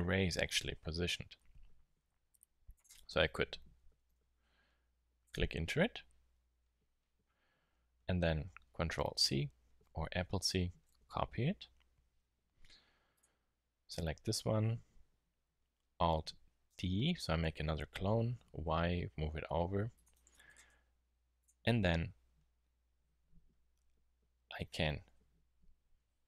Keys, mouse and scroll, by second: 2.7-4.2 drag, 4.2 super+z, 17.1 alt+d, 23.4-26.2 middle drag.